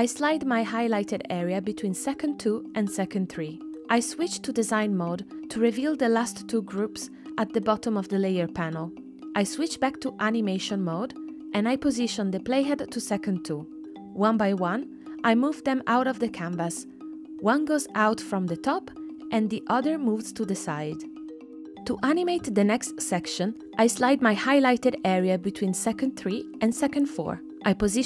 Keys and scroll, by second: 18.4 space, 21.7 space.